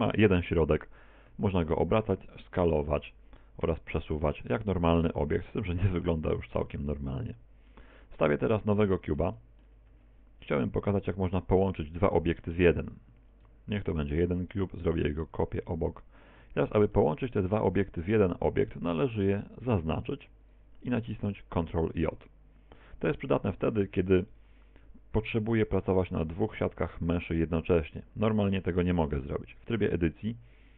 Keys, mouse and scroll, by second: 1.3 r, 4.0 g, 5.4 middle click, 8.0 x, 8.8 middle click, 9.4 middle click, 9.9 shift+a, 11.7 middle click, 12.4 shift+middle click, 13.3 click, 14.6 shift+d, 16.4 ctrl+click, 17.0 middle click, 18.8 right click, 19.2 right click, 19.6 right click, 20.4 shift+right click, 28.3 right click.